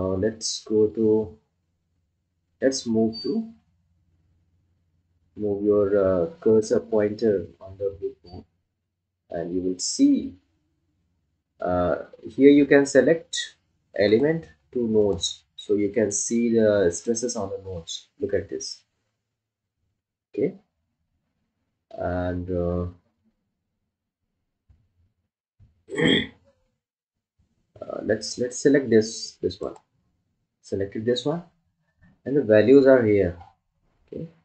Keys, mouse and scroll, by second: 4.0 scroll up 1, 9.4-11.5 scroll down 1, 15.4 click, 30.0 click.